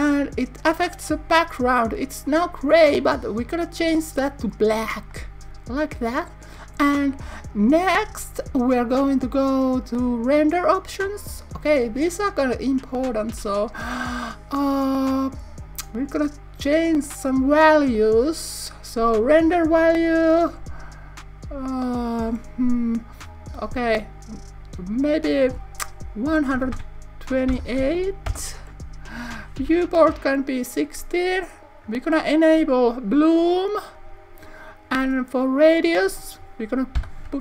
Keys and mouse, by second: 3.4 click, 6.6 click, 10.6 click, 17.6-29.1 drag, 32.5 click, 33.4 click, 35.8 click.